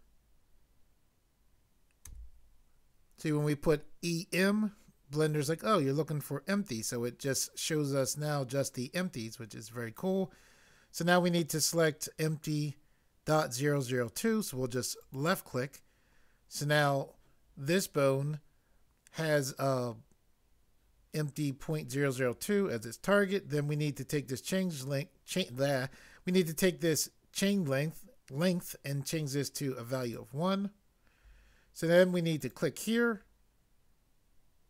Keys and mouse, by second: 2.0 m.